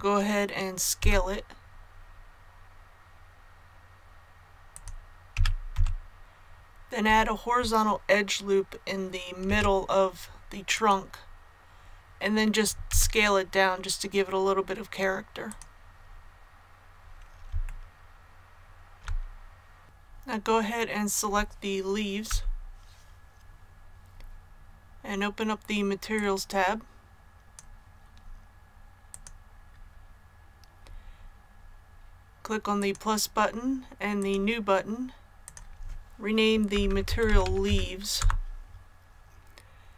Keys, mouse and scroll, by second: 0.9 s, 4.6 click, 5.3 s, 5.7 z, 6.2 click, 9.4 ctrl+r, 10.7 click, 12.8 s, 15.4-16.5 drag, 17.6 shift+middle click, 19.8 click, 26.1-36.4 drag, 36.7-37.6 typing, 38.1 Return.